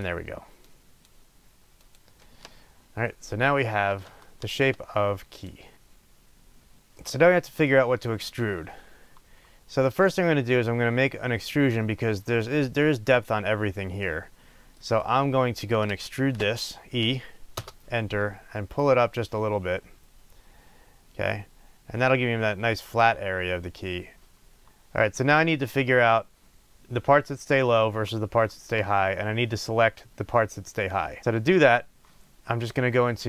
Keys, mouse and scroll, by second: 2.6 scroll down 1, 4.2 shift+middle click, 5.3 click, 6.9 shift+middle click, 7.9 scroll down 1, 14.2 middle drag, 17.6 t, 24.6 middle click, 25.4 scroll up 1.